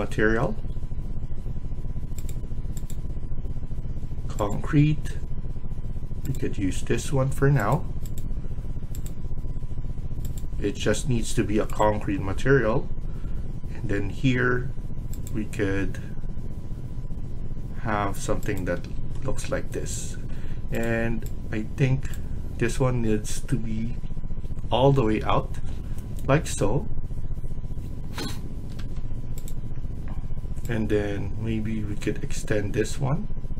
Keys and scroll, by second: 18.6 Escape, 20.0 Escape, 28.6 Escape, 29.0 Escape.